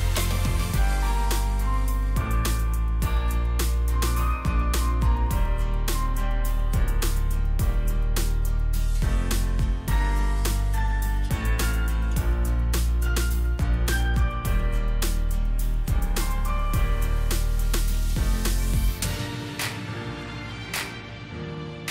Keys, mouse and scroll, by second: 0.0 shift+click, 5.0 Up, 5.1 Up, 5.4 Up, 5.6 Up, 5.7 Up, 6.1 Up, 6.5 Up, 7.0 Up, 8.7-9.1 alt+scroll down 1, 9.4-10.1 alt+scroll down 3, 10.1-11.0 alt+scroll down 1, 11.9 alt+scroll up 1, 18.1 Left, 20.2 Up, 21.1 Left.